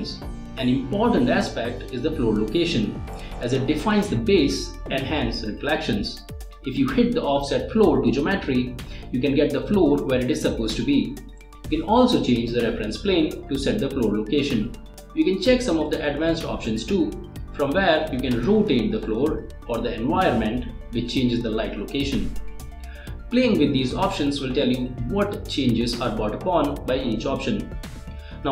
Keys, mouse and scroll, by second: 3.7-4.3 drag, 6.4-8.9 drag, 10.4 click, 15.1 click, 17.5 click, 21.2-21.8 middle drag, 23.6 click, 24.8 click, 26.7 click, 27.5 click.